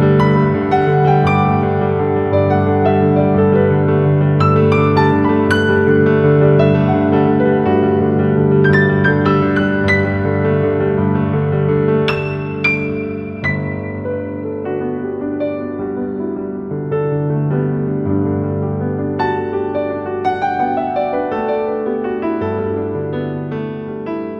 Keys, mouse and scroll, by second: 7.7 ctrl+click, 10.5-14.9 shift+drag, 14.9-17.1 shift+drag, 17.3 scroll up 1, 17.9-19.4 typing, 18.3 click, 18.7 click, 19.1 click, 19.7 click, 23.0 ctrl+c, 23.2-24.1 scroll down 1, 24.1 click.